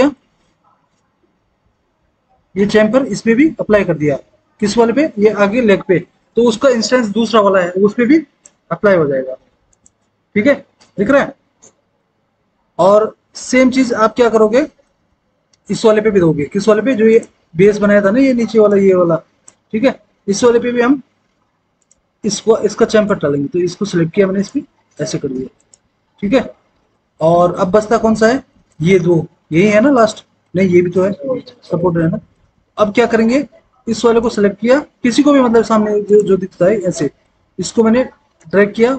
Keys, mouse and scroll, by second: 0.3 F4, 19.8 ctrl+z.